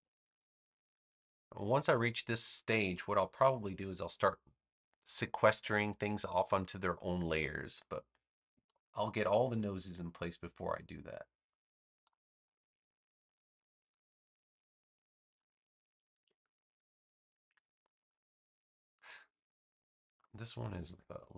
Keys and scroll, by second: 0.8 space, 9.3 a, 13.5 space, 16.1 super+v, 17.4 v, 20.8 a.